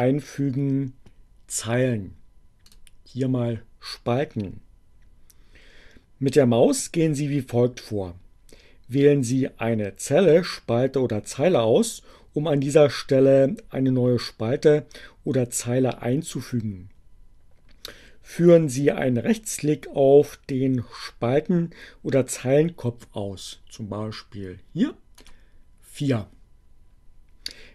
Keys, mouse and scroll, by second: 1.7 click, 24.4 right click.